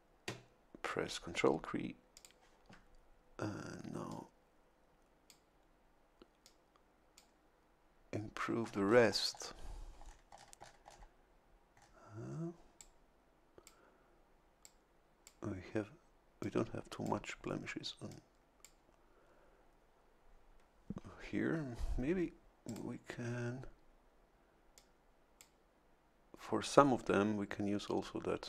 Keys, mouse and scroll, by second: 2.1 ctrl+click, 4.1-5.5 drag, 6.4 click, 8.3 scroll down 2, 10.0-10.3 scroll down 2, 11.7 scroll up 2, 12.7-13.8 drag, 14.6 click, 16.4 click, 18.1 click, 22.6 click, 24.7 click.